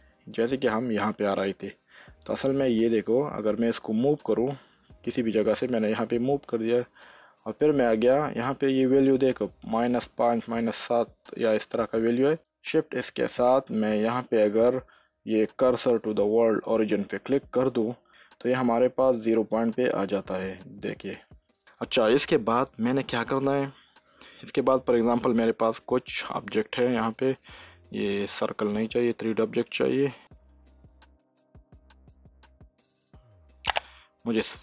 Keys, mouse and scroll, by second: 0.9 typing, 3.9-6.9 drag, 12.4 click, 13.7 shift+s, 16.8 s, 24.0-25.6 drag, 25.6 shift+a, 27.4 click, 28.8 ctrl+z, 30.1 shift+s, 30.2 click, 31.4 shift+a.